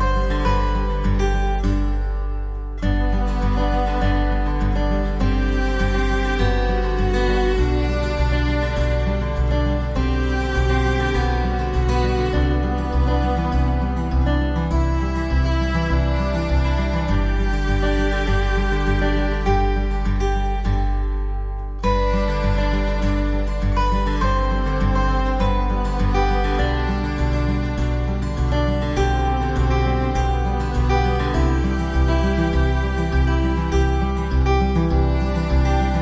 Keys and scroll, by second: 0.5 alt+Num_Lock, 2.2 ctrl+d, 3.3 ctrl+d, 10.7 ctrl+e, 11.5 v, 13.3 ctrl+e, 15.7 ctrl+e, 15.8 ctrl+i, 16.1 b, 17.5 b, 17.9 x, 19.0 x, 19.1 ctrl+z, 20.2-21.1 typing, 28.3 x, 30.3 v, 31.5 ctrl+o.